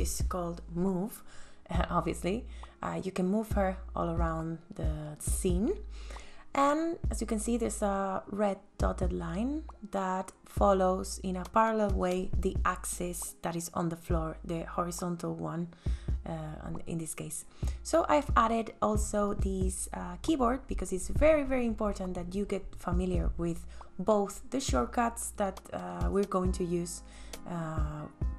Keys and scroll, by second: 17.4 space.